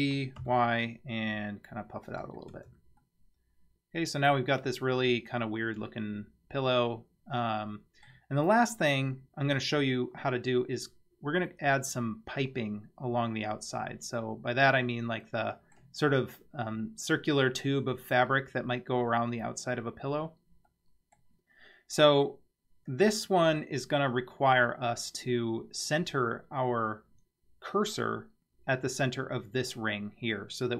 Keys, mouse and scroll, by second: 2.5 Tab, 3.0-8.1 middle drag, 14.1-14.7 scroll up 1, 14.7-15.2 scroll up 1, 15.2-15.8 middle drag, 20.2-20.8 scroll down 2, 20.7-21.2 middle drag, 21.9 scroll up 2.